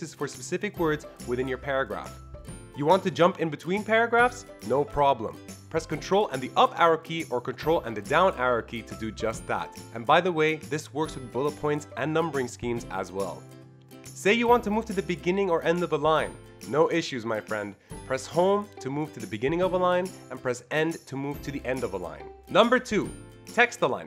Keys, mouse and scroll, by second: 0.9 ctrl+Right, 1.3-2.0 ctrl+Right, 2.4 ctrl+Down, 2.7 ctrl+Down, 3.2 ctrl+Down, 3.7 ctrl+Down, 4.1 ctrl+Down, 5.9 ctrl+Down, 6.4 ctrl+Down, 7.3 ctrl+Down, 7.7 ctrl+Up, 8.1 ctrl+Up, 9.0 ctrl+Up, 9.4 ctrl+Up, 10.2 ctrl+Up, 11.0 ctrl+Up, 11.4 ctrl+Up, 12.9 ctrl+Up, 13.3 End, 13.3 Home, 13.3 click, 13.6 Down, 13.9 Home, 14.3 Down, 14.6 End, 14.9 Down, 15.3 Down, 15.9 End, 16.2 Down, 16.6 Home, 16.9 Down, 17.3 End, 17.7 Down, 17.9 Down, 18.6 End, 18.9 Down, 19.3 Home, 19.6 Down, 19.9 End, 20.3 Down, 20.6 Down, 21.1 End, 21.5 Down, 21.8 Home, 22.2 Down.